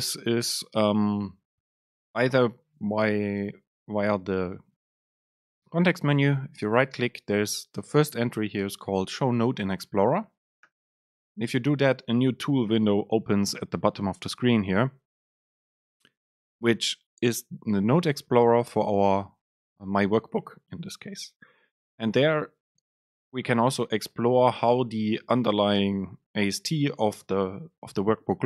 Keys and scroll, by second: 10.9 ctrl+x.